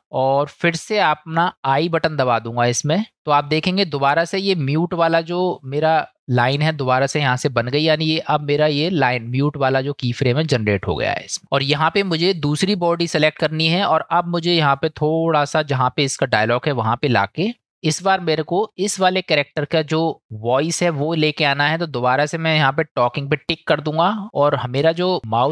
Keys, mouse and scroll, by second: 12.0 click, 15.5 click, 19.1-19.5 shift+middle drag, 23.6 click.